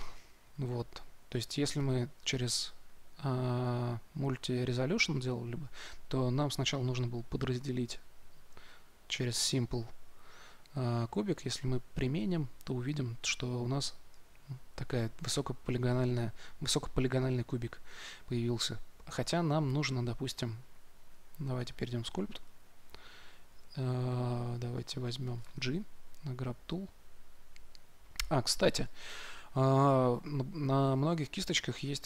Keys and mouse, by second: 1.7-3.5 drag, 6.3-13.3 drag, 12.8 Tab, 22.6-23.6 drag, 25.7 g, 28.4 f.